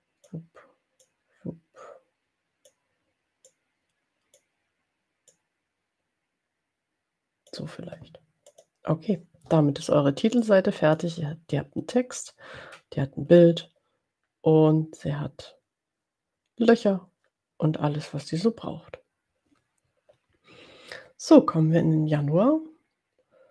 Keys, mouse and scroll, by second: 0.9-3.0 drag, 3.4 click, 5.2 click, 8.5 click, 10.6 click, 13.5 scroll up 2.